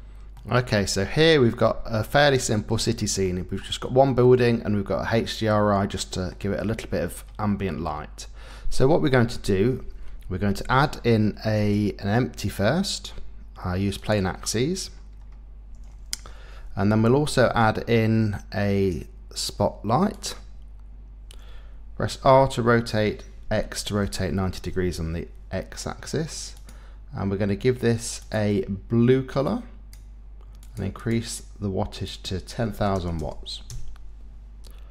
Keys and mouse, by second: 1.1 middle click, 1.7-2.7 middle drag, 3.2 middle click, 4.2-6.3 middle drag, 7.8 middle click, 10.7 shift+a, 17.3 shift+a, 22.2 r, 23.4 x, 24.0 KP_9, 24.0 KP_0, 24.6 KP_Enter, 26.6 click, 28.2 click, 31.0-33.0 drag, 33.0 KP_0.